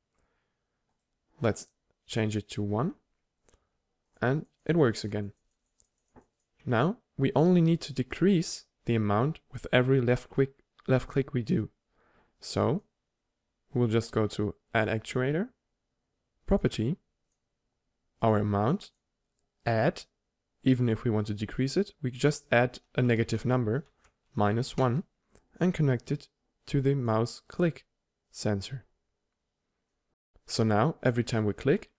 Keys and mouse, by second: 0.8-2.8 drag, 2.2-2.6 right drag, 3.6 p, 6.5 p, 12.6-16.5 drag, 17.2-20.5 drag.